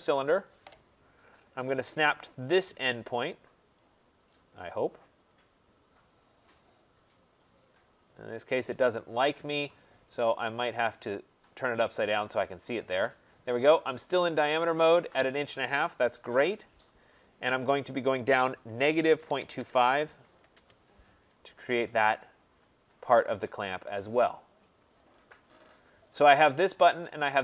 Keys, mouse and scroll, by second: 0.3 click, 1.1-1.8 scroll, 3.8 scroll, 4.3 right click, 4.5-5.4 scroll, 10.6 right click, 12.0 click, 16.2 Return, 18.6-20.7 typing, 21.4-21.9 scroll down 4, 23.2 right click, 23.2-25.1 scroll, 25.1-26.0 scroll, 26.1 click.